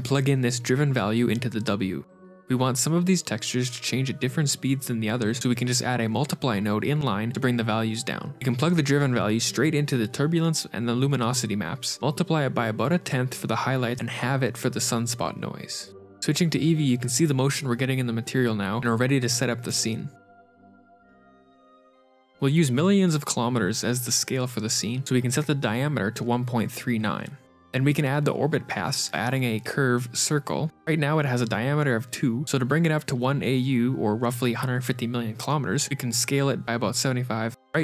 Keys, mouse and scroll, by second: 1.0 middle click, 2.3 shift+a, 5.2 click, 6.2 click, 6.9 click, 10.7 click, 11.2 middle click, 11.2 shift+a, 11.3 click, 11.5 shift+d, 12.1 click, 13.7 middle click, 14.0 click, 15.2 click, 16.2 right click, 16.4 ctrl+shift+r, 17.4 click, 17.4-18.0 scroll up 5, 17.4 shift+space, 18.2-18.5 scroll down 1, 22.1 KP_1, 22.1 KP_Decimal, 22.1 KP_3, 22.1 KP_9, 22.2 click, 27.0 middle click, 29.2 shift+a, 30.5 middle click, 33.4 s, 35.4-37.2 scroll down 21, 37.6 shift+middle click.